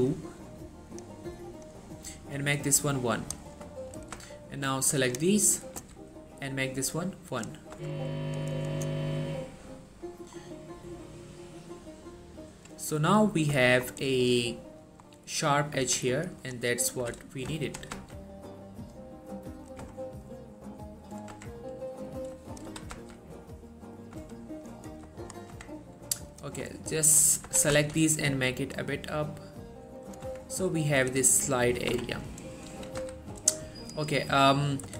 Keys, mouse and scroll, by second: 3.2 click, 3.8 shift+middle click, 4.1 scroll up 1, 4.2 z, 4.8-5.5 click, 5.9 z, 6.9-7.8 click, 7.9 Tab, 8.1-10.0 scroll down 1, 10.5 scroll up 1, 13.1 scroll up 1, 13.8 shift+middle click, 14.1-14.6 scroll down 1, 15.1 scroll up 1, 15.9 Tab, 16.5 click, 17.7 g, 18.1 z, 19.7 click, 19.9 Tab, 20.1 scroll down 1, 21.4 Tab, 21.6-22.0 scroll up 1, 22.2 click, 22.8 g, 23.1 z, 24.1 click, 24.3 Tab, 24.6-25.0 scroll down 1, 25.3 shift+middle click, 25.4-26.0 shift+scroll up 3, 25.6 Tab, 26.4 click, 27.2 ctrl+shift+click, 27.4 scroll up 1, 27.6 typing, 30.1 click, 30.3 Tab, 30.6-31.3 scroll down 1, 32.0 Tab, 32.4-32.8 scroll up 1, 32.8 a, 33.1 z, 33.9 click, 34.4 middle click, 34.6-34.9 scroll up 1.